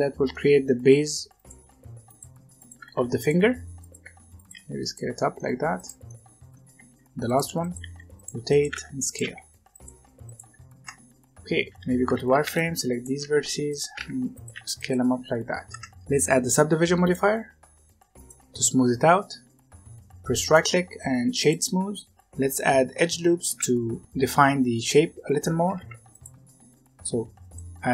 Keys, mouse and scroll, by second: 0.7-4.4 typing, 5.0 middle click, 5.7 click, 6.0 middle click, 6.8-10.0 typing, 10.8 Tab, 11.7-15.0 typing, 12.1 alt+a, 15.6 Tab, 16.9-20.0 drag, 20.4-22.1 right drag, 22.1 Tab, 25.6 ctrl+r.